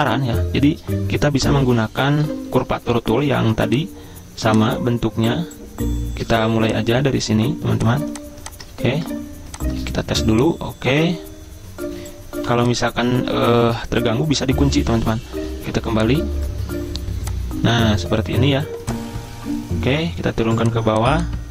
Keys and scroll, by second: 1.4 i, 2.8 `, 8.7 ctrl+z, 8.9 ctrl+z, 9.8 ctrl+z, 10.1 ctrl+z, 12.4 v, 13.6 ctrl+2, 15.7 `.